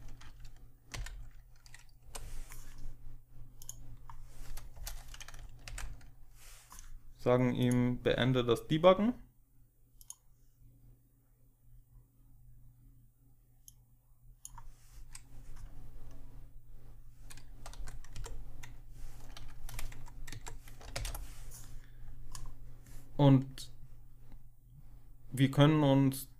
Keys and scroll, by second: 0.8 ctrl+alt+7, 1.9 Delete, 4.6 Return, 5.5 Return, 5.6 Delete, 8.6 ctrl+alt+0, 17.6 Delete, 18.0 Up, 20.2 Down, 20.8 ctrl+alt+0.